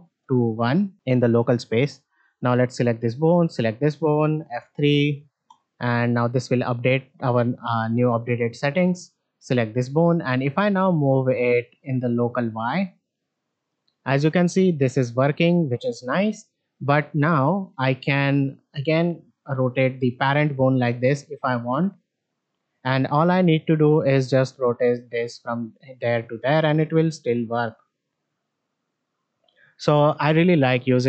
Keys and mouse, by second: 0.1 KP_1, 0.8 click, 1.3 middle click, 1.7 shift+middle drag, 2.3 drag, 3.3 shift+drag, 4.5 F3, 6.1 shift+middle drag, 7.7 click, 8.9-12.0 drag, 12.8-16.0 drag, 16.7-17.0 middle drag, 17.5-22.2 middle drag, 22.7-23.1 shift+middle drag, 23.7 click, 24.6-31.0 drag.